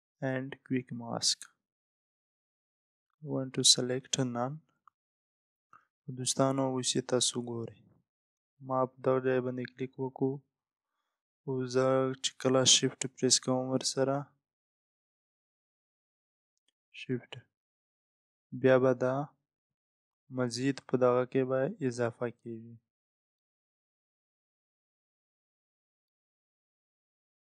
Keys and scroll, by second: 2.6 Up.